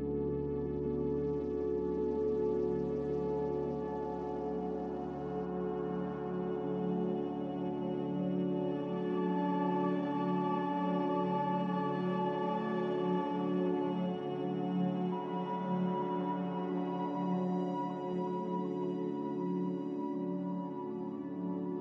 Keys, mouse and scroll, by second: 9.6 Escape, 9.7 Escape, 10.9 ctrl+z.